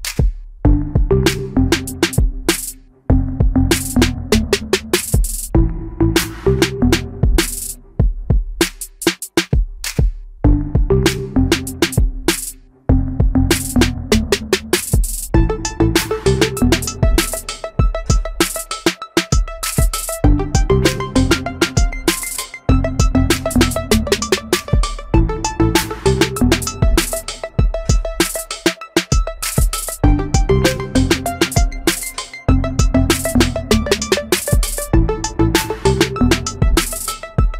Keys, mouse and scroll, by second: 4.8 shift+middle click, 7.8 space, 8.7 Escape, 12.8 m, 14.8 shift+click, 15.3 shift+middle click, 20.6 space, 29.0 shift+middle click.